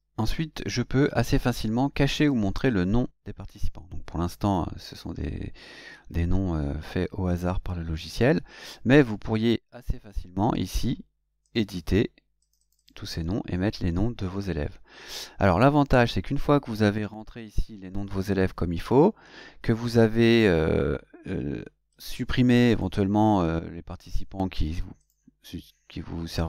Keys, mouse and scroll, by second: 2.1 click, 11.4 click, 12.4 click, 21.9 click, 22.7 click, 24.0 click, 25.0 click, 26.3 click.